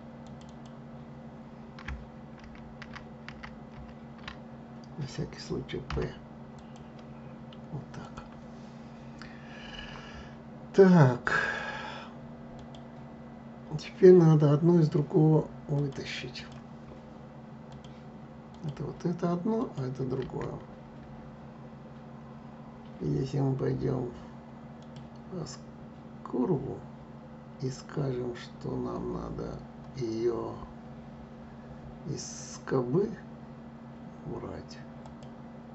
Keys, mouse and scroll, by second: 0.1 click, 2.1 ctrl+z, 2.5 ctrl+z, 3.4 ctrl+z, 5.6 p, 7.7 click, 11.1-12.4 drag, 15.4-17.5 drag, 18.2 click, 19.3 click, 24.5 click, 34.7 click.